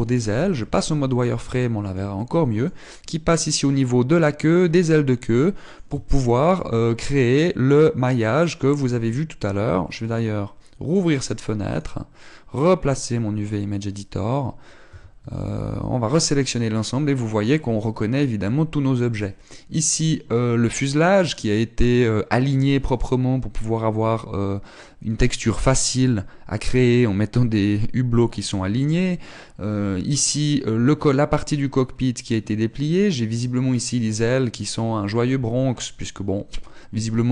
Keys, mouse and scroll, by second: 0.8 z, 1.3 middle click, 2.2 shift+middle click, 2.8 middle click, 5.4 scroll down 4, 5.9 middle click, 6.6 shift+middle click, 10.6 click, 14.8 click, 15.5 a, 15.8 a, 18.6 scroll down 9, 19.0 a.